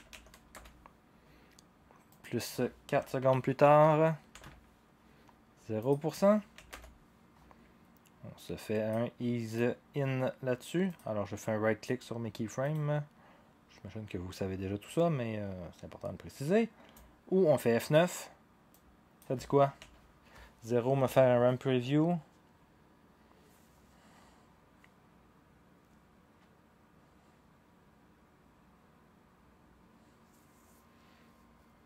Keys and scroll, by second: 0.0-0.7 typing, 2.6-4.3 typing, 6.3-7.2 typing, 19.8 0.